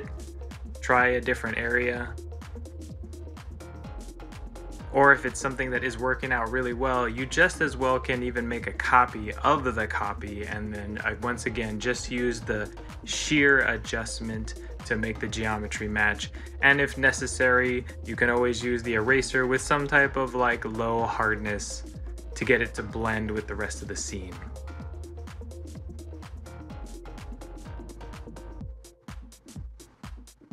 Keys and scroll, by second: 6.3 ctrl+c, 6.7 ctrl+l, 7.1 ctrl+l, 13.2 ctrl+z, 15.6 ctrl+z, 18.6 ctrl+c, 18.7 ctrl+l, 24.2 ctrl+z, 26.1 ctrl+z.